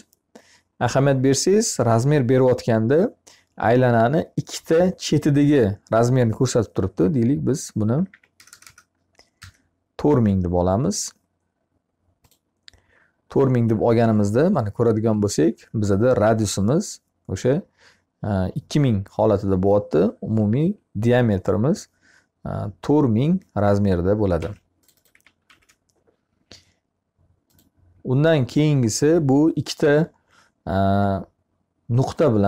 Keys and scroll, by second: 7.5 4, 9.0 0, 9.2 Return, 23.8 Escape, 25.3 e.